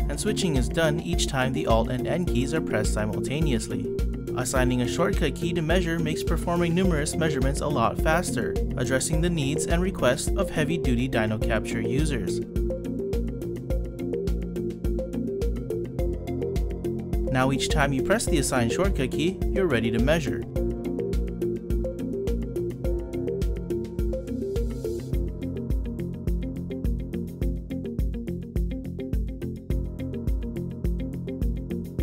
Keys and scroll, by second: 1.5 alt+n, 18.2 F4, 22.3 F4.